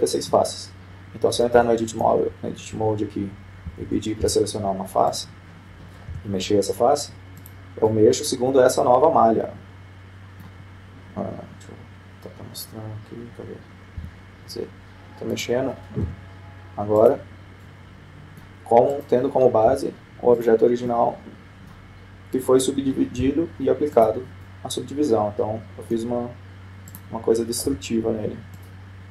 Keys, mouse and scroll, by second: 3.2 Tab, 5.5 ctrl+Tab, 6.7-8.0 right drag, 7.8 g, 9.5-11.1 middle drag, 15.7 z, 16.9-18.3 right drag, 17.8 g, 19.3-20.5 middle drag, 20.5-21.9 right drag, 21.3 g, 22.5-23.9 middle drag, 24.0-25.3 right drag, 24.9 g, 26.2-27.5 middle drag, 28.6-29.1 right drag.